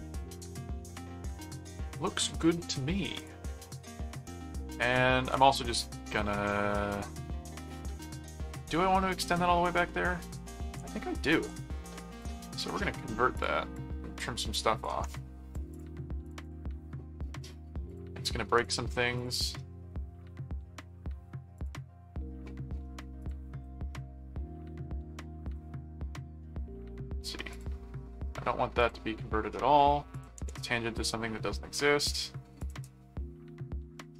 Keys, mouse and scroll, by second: 3.2 click, 4.3 click, 5.3 ctrl+a, 11.5 click, 12.2 click, 13.3-14.8 drag, 15.7 click, 17.9 click, 18.6 click, 20.6 ctrl+4, 21.5 click, 23.2 click, 25.4 click, 27.5 click, 28.7 click, 30.1 click, 31.0 click, 32.6 click.